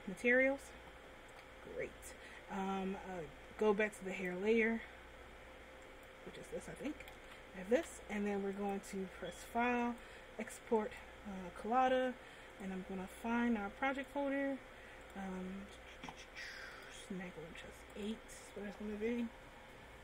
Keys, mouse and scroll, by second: 1.4 Tab, 4.3 click, 6.1 click, 6.8 a, 7.4 a, 8.8 click.